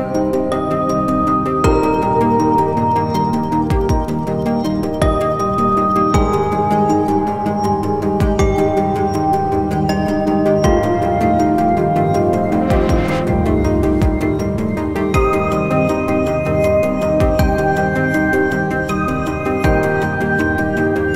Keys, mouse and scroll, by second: 0.5 scroll up 1, 0.6 alt+click, 14.5-15.1 scroll up 1.